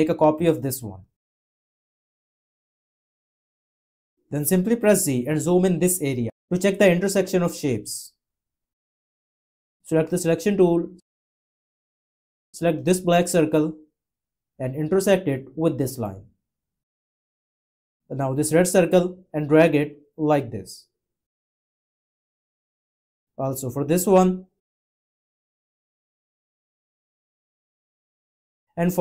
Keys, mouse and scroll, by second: 5.0 z.